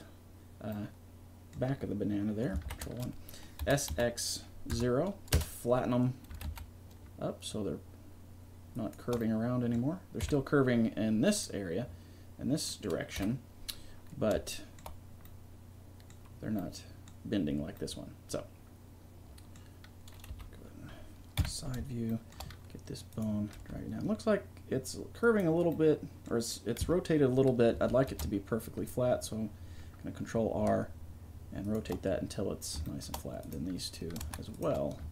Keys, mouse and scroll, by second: 2.7 ctrl+KP_1, 3.6 s, 6.3 g, 9.4 click, 10.2 KP_3, 13.2 KP_7, 20.3 KP_1, 21.4 KP_3, 22.8 middle click, 23.1 right click, 23.5 g, 25.8-27.1 drag, 26.8 KP_3, 28.1 ctrl+r.